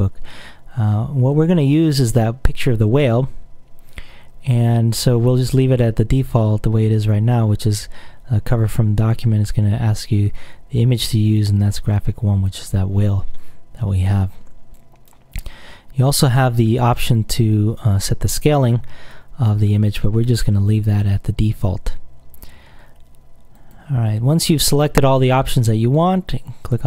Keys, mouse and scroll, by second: 1.5-3.6 drag, 9.3-12.0 drag, 14.9 click, 16.2-20.4 drag, 23.7 click, 26.1-26.8 drag.